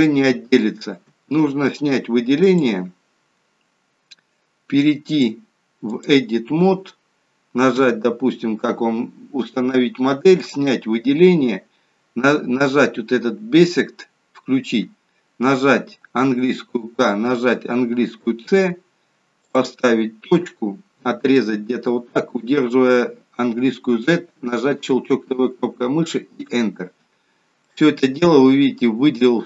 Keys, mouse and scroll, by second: 2.7 click, 3.5-5.1 scroll down 1, 5.1 click, 7.8 KP_1, 10.4 click, 16.3 k, 27.7 middle click.